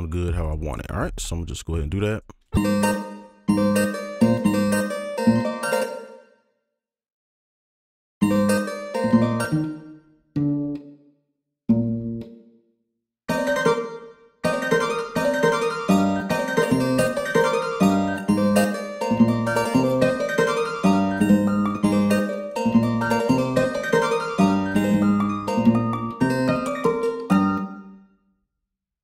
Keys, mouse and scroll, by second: 0.7 right click, 2.9 space, 3.1 alt+click, 3.5 alt+click, 3.5 space, 4.2 alt+click, 4.4 alt+space, 5.2 alt+click, 5.7 ctrl+click, 5.8 ctrl+click, 6.0 shift+click, 6.2 shift+click, 6.4 alt+scroll down 2, 6.6 right click, 7.8 alt+click, 8.2 alt+click, 8.2 space, 9.4 space, 12.3 click, 12.7 scroll up 2, 13.2 space, 13.7 space, 13.9 ctrl+click, 14.7 right click, 14.8 scroll down 1, 15.0 space, 15.1 space, 15.3 right click, 15.7-16.2 scroll down 1, 16.2 space, 16.2 scroll up 1, 16.3 space, 17.3 scroll down 1, 17.7 ctrl+a, 18.0 shift+click, 18.1 shift+space, 18.2 shift+space, 18.5 shift+right click, 18.9 alt+click, 19.1 alt+right click, 20.0 ctrl+click, 20.1 shift+click, 20.5 alt+click, 21.7 scroll down 1, 21.7 space, 21.8 space, 22.7 right click, 23.0 alt+click, 23.4 ctrl+click, 23.6-24.4 alt+scroll down 2, 23.7 right click, 24.5 alt+click, 25.9-26.7 scroll down 1, 26.8 ctrl+right click, 27.5 space, 27.9 double click.